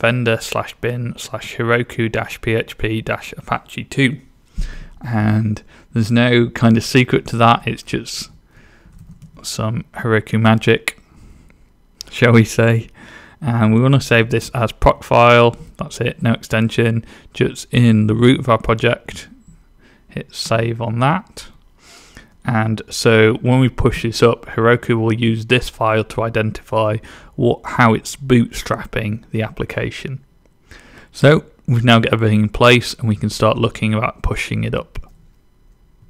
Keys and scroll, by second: 8.1-9.6 typing, 13.8-15.4 typing.